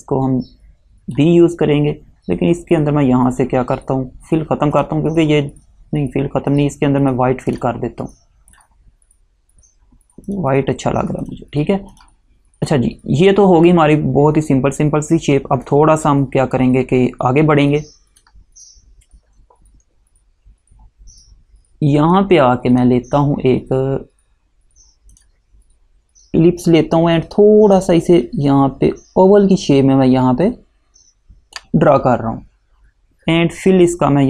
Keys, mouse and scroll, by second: 4.9 click, 7.6 click, 15.8 click, 22.3 click, 25.3 click, 28.0 click.